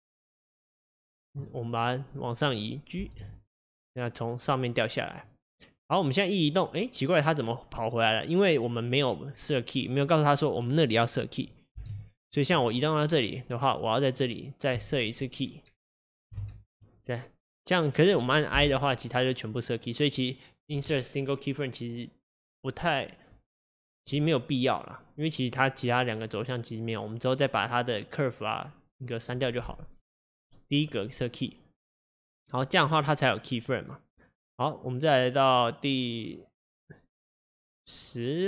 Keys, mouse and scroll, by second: 6.5-9.5 drag, 14.9-16.4 right drag, 16.4 ctrl+z, 18.6 i, 33.8-37.8 drag.